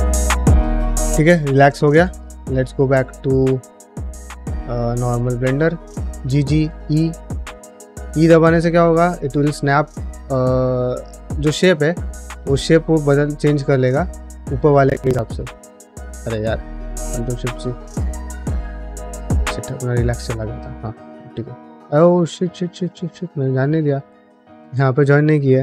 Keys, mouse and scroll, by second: 2.3 middle click, 2.6 middle click, 3.2 alt+click, 3.9 middle click, 4.5 shift+middle click, 4.8 middle click, 5.3 middle click, 5.8 g, 8.1 middle click, 9.9-11.6 middle drag, 12.0 ctrl+z, 15.1 ctrl+z, 15.2 ctrl+z, 15.6 middle click, 16.2 ctrl+shift+z, 16.8 middle click, 19.5 ctrl+shift+z, 20.0 middle click, 21.7 2, 21.9 1, 22.5 alt+z, 22.9 3, 23.2 click, 23.5 middle click, 23.9 alt+z, 24.2 1, 24.5 click, 24.8 shift+click.